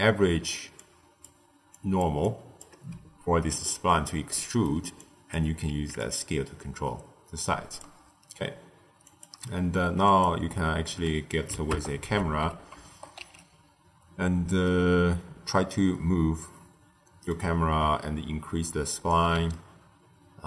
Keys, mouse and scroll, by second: 0.3 d, 0.7-1.2 drag, 1.2-1.6 d, 1.6 click, 1.9 d, 2.1-2.6 drag, 2.6-3.1 d, 4.3 middle click, 4.9 click, 5.9-8.9 shift+drag, 9.7 q, 11.6 KP_0, 13.1 q, 14.6-17.7 shift+middle drag, 17.7 q, 19.4-20.4 ctrl+middle drag.